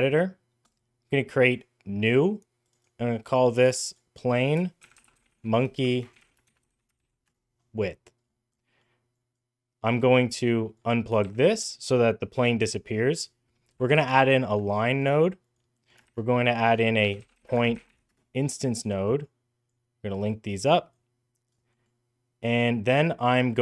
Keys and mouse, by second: 0.5-1.3 drag, 1.3 middle click, 2.5 click, 3.7-7.6 drag, 5.6 BackSpace, 8.6 middle click, 9.1 click, 10.4 drag, 11.0 shift+a, 15.2 click, 15.6 middle click, 15.9 shift+a, 19.0-19.5 drag, 20.2-20.7 drag, 21.5 middle click.